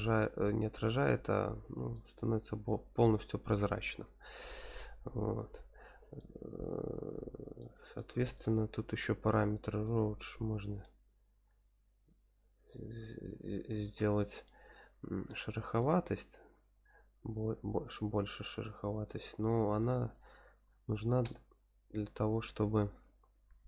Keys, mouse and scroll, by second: 1.9-4.4 middle drag, 6.2-7.6 middle drag, 7.9-8.3 middle drag, 10.1-11.3 drag, 11.6 click, 12.6-15.5 drag, 15.8-18.4 middle drag, 19.8-23.6 drag.